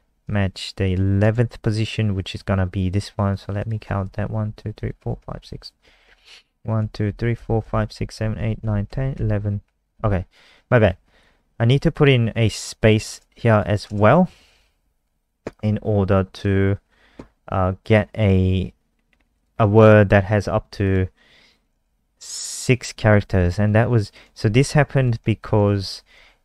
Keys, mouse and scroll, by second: 0.2 alt+click, 0.8 click, 3.5 click, 4.3 Right, 4.5 Right, 4.7 Right, 4.9 Right, 5.2 Right, 5.4 Right, 5.8 Left, 6.7 Right, 7.0 Right, 7.3 Right, 7.6 Right, 7.8 Right, 8.1 Right, 8.3 Right, 8.6 Right, 8.8 Right, 9.1 Right, 12.8 click, 13.8 click, 22.1 click, 24.7 Left, 24.8 Left, 24.9 Left, 25.1 Left, 25.3 Left, 25.4 Left, 25.6 Left, 25.8 Left, 25.9 Left, 26.1 Left, 26.3 Left.